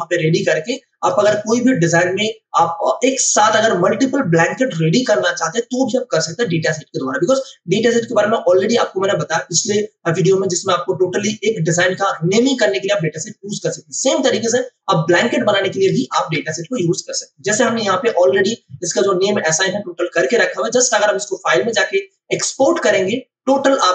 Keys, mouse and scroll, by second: 16.1 ctrl+space, 16.7 ctrl+alt+click.